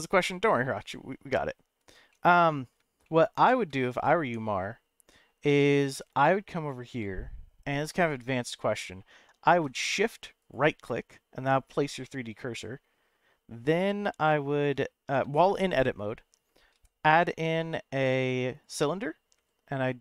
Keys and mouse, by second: 2.1-2.7 middle drag, 3.0-3.6 shift+middle drag, 4.2 Tab, 5.4 middle click, 6.2 middle click, 10.4 shift+right click, 12.0 middle click, 16.7 shift+a, 19.4 s.